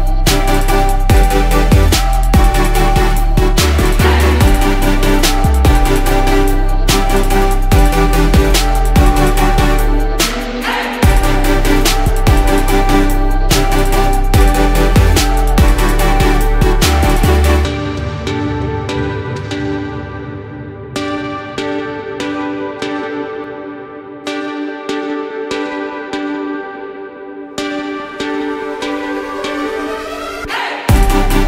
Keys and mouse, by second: 9.2-9.9 drag, 15.9 click, 22.9 middle click, 23.8 ctrl+shift+click.